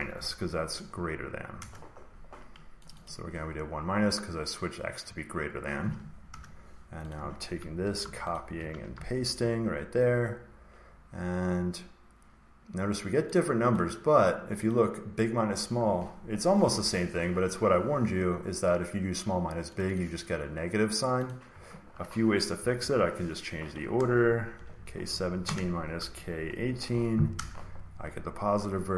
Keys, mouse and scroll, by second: 0.0-2.0 typing, 2.8-5.0 drag, 6.2 Return, 7.0 click, 7.9 ctrl+c, 8.3 click, 8.8 ctrl+v, 13.7 click, 14.6 click, 16.7 Escape, 19.7 click, 19.9 click, 21.2 click, 22.5 Right, 22.7 Right, 22.9 Right, 23.9-24.5 typing, 24.6 Right, 24.8 Right, 25.0 Right, 25.3 Right, 25.9-26.5 typing, 27.3 Return.